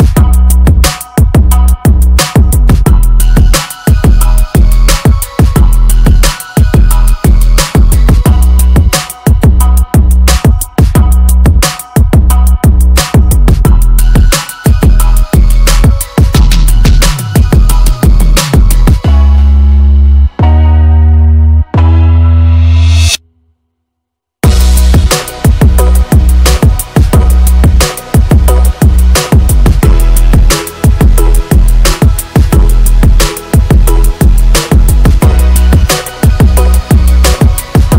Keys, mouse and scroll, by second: 4.7 click.